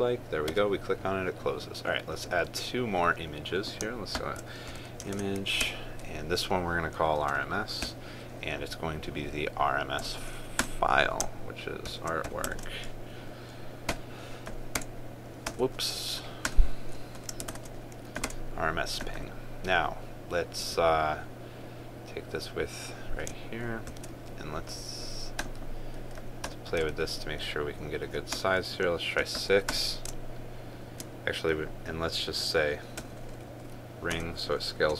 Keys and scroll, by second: 5.8 ctrl+space, 13.3 ctrl+space, 18.2 ctrl+space, 24.6 ctrl+c, 27.6 ctrl+v.